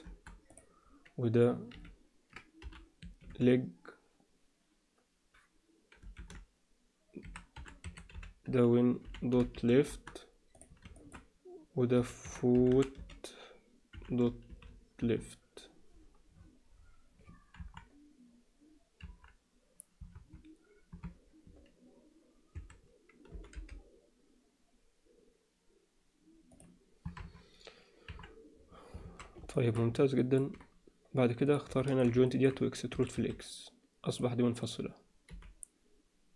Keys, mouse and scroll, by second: 0.5 click, 1.7 F2, 10.5 click, 11.0 alt+shift+middle click, 12.0 F2, 12.7 o, 17.5 KP_1, 20.1 KP_3, 22.5 a, 23.3 g, 27.2 KP_3, 28.1 KP_1, 29.0 alt+a, 29.5 alt+shift+middle click, 30.1 ctrl+middle click, 31.4 click, 31.8 shift+middle click, 32.3 ctrl+alt+middle click, 32.9 e, 34.6 click, 35.3 g.